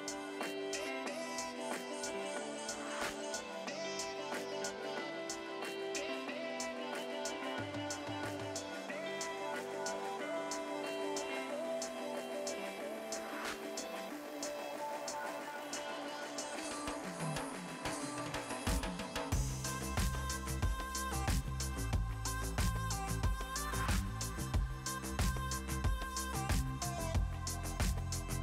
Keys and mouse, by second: 1.3 ctrl+shift+x, 4.8 KP_5, 4.9 KP_1, 5.5 ctrl+click, 6.3 KP_2, 6.5 Return, 10.1 Return, 12.8 click, 13.3 click, 14.5 KP_2, 14.6 Return, 15.9 click, 17.0 click, 17.6 Escape, 17.8 click, 18.1 Escape, 18.3 click, 20.0 click, 20.8 click, 21.0 ctrl+click, 21.2 r, 21.4 Left, 21.9 Right, 22.2 click, 23.2 click, 23.6 ctrl+click, 23.8 Delete, 24.1 click, 25.6 click, 27.8 c.